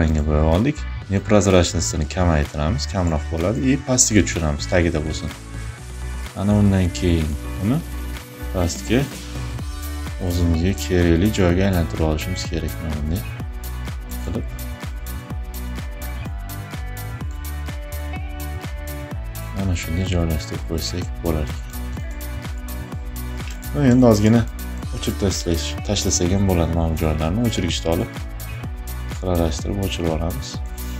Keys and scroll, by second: 23.1 space, 24.5 e, 25.5 ].